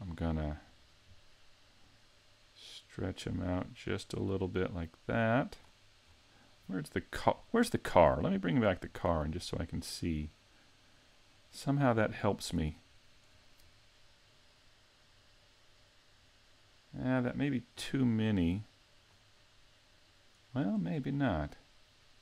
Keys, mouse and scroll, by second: 1.8 click, 6.0-7.4 scroll down 2, 7.4-8.8 scroll down 4, 8.8 shift+click, 9.4-10.0 scroll up 4, 11.5-12.0 scroll down 2, 12.2 shift+middle click, 12.7 scroll up 2, 17.7 click, 18.1 click, 18.3 click, 19.7 middle click.